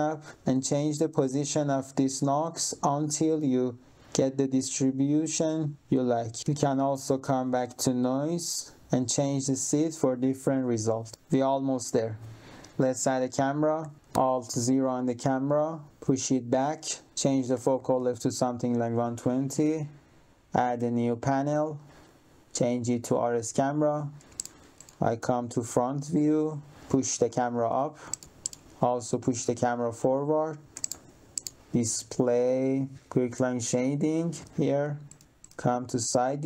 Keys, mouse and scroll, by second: 0.6 click, 2.2 click, 4.6 click, 7.2 click, 8.1 click, 9.0 click, 9.8 click, 12.8 click, 13.8 3, 14.4 alt+0, 15.9 click, 17.0 click, 17.2-18.2 typing, 19.6 click, 20.6 click, 22.0 click, 22.7 click, 24.3 middle click, 24.7 middle click, 25.7 click, 26.3 click, 28.1 middle click, 28.3 middle click, 28.6 click, 29.6 click, 30.7 middle click, 31.3 middle click, 31.6 click, 32.9 click, 35.0 middle click, 35.3 middle click, 36.1 1, 36.3 click.